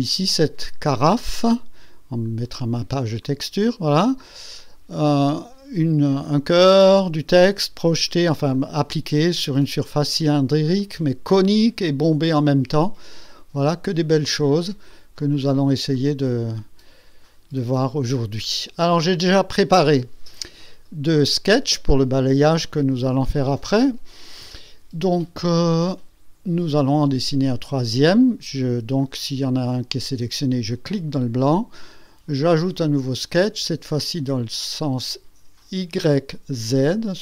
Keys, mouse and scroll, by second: 0.4 click, 2.2 click, 3.2 click, 4.6 click, 6.1-8.3 drag, 8.5-10.4 drag, 10.8 click, 11.3-14.8 drag, 14.9 click, 15.9-17.4 drag, 18.1 click, 19.3 click, 29.0 click, 29.5 click, 30.7 click, 32.6 click, 36.8 click.